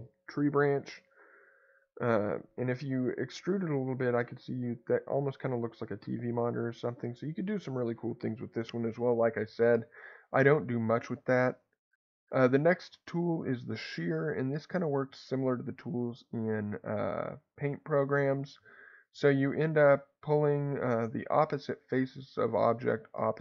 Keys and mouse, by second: 9.6 Escape, 12.5 click, 14.6-23.4 drag.